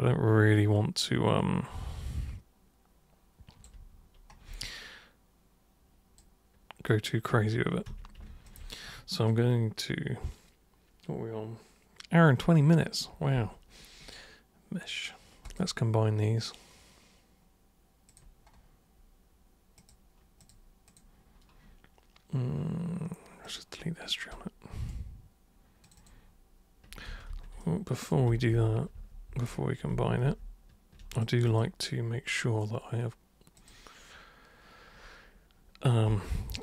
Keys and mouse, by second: 4.6-6.2 alt+drag, 6.9-7.2 alt+drag, 7.9 super+q, 8.4 ctrl+shift+super+click, 15.5 super+click, 18.0 super+click, 19.8 super+click, 20.4 super+click, 20.9 super+click, 23.4 super+click, 24.3 super+right click, 25.8 super+click, 27.0 ctrl+super+z, 27.3 ctrl+super+z, 27.6 super+right click, 28.3 ctrl+super+z, 28.5 ctrl+super+z, 28.9 ctrl+super+z, 29.3 ctrl+super+z, 29.9 ctrl+super+z, 30.2 ctrl+super+z, 31.1 super+click, 31.5 super+click, 33.5 super+click.